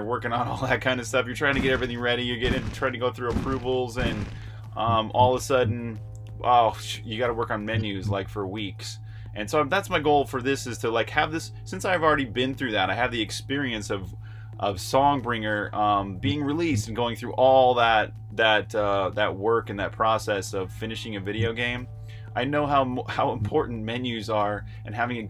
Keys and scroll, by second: 0.2-2.6 typing, 7.1-8.2 typing, 15.9-16.9 typing, 21.1 j, 23.1 s, 24.5-25.2 typing.